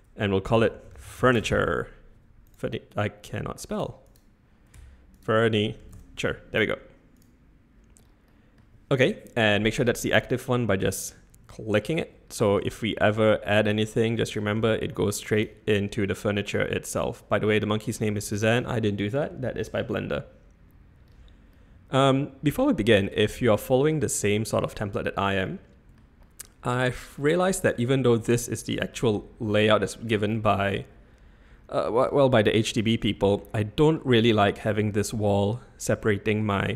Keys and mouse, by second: 1.4 e, 2.4-3.7 middle drag, 3.7 click, 4.1 click, 4.7 F2, 7.1 click, 8.3 middle drag, 11.0 click, 12.8 shift+a, 14.5 g, 15.8 x, 18.1-18.5 typing, 21.5-22.6 middle drag, 23.1-23.4 shift+middle drag, 23.6 middle drag, 25.5-25.9 middle drag, 26.2-26.9 middle drag, 28.0 z, 28.3-28.9 middle drag, 28.9 z, 29.5 middle drag, 32.3-32.7 middle drag, 33.3-33.9 shift+middle drag, 34.1 middle drag, 35.3-35.9 shift+middle drag, 36.1-36.4 middle drag.